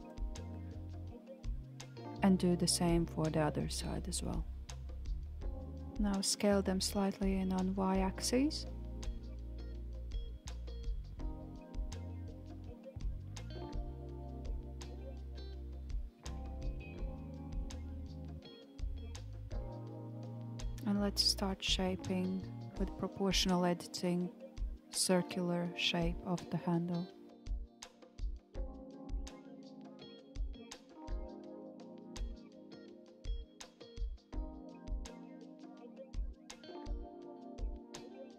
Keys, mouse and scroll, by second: 3.2 alt+shift+click, 3.9-6.3 middle drag, 6.3 KP_7, 8.0 s, 14.8-15.2 scroll down 1, 15.2-16.4 middle drag, 16.4 scroll down 1, 16.6-20.2 middle drag, 20.2 click, 21.5 middle click, 21.7-24.1 drag, 24.1 KP_1, 25.2 g, 33.2 g, 36.9-37.8 middle drag, 37.8 click.